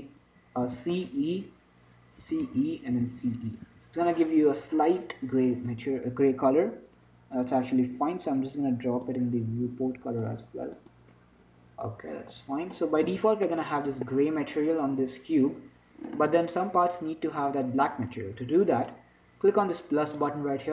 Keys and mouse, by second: 7.9-12.9 drag, 12.6 Tab, 13.4 z, 17.8-20.7 drag.